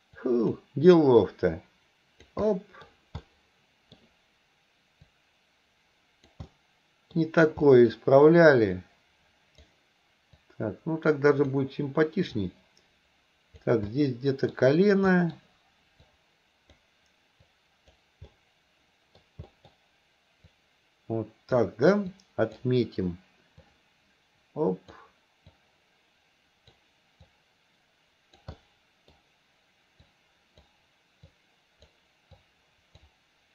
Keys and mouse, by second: 0.2 click, 1.2-2.3 drag, 2.5 middle click, 3.2 middle click, 5.1-6.3 drag, 6.5 middle click, 7.7 middle click, 8.8 click, 10.4-11.6 drag, 12.4-13.6 drag, 13.9 middle click, 15.1 middle click, 16.2 click, 17.5 click, 18.3 middle click, 19.5 middle click, 20.6-21.6 drag, 22.1 click, 23.7-25.0 drag, 25.6-26.8 drag, 27.3-28.4 drag, 28.6 middle click, 30.1 click, 31.3 click, 32.4 click.